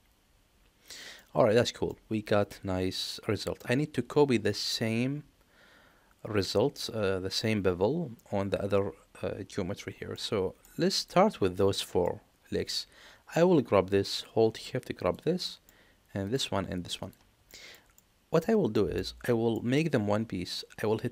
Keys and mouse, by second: 1.8-3.5 middle drag, 10.1 middle click, 10.8 click, 11.7 middle click, 15.3 middle click, 16.1 shift+click, 16.9 shift+click, 17.4 shift+middle drag, 17.9-18.3 middle drag, 18.6 shift+middle click, 19.1 middle click.